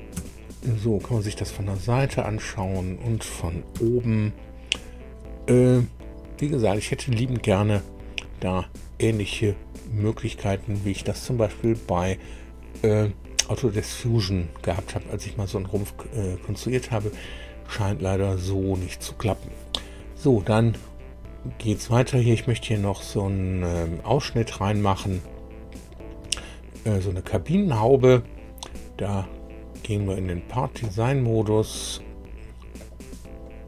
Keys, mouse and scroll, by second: 0.1 KP_1, 1.8 shift+scroll down 3, 2.2 shift+click, 3.7 KP_2, 8.0-8.6 scroll up 2, 8.6 scroll up 1, 9.2 scroll down 2, 32.7 click, 33.4 click.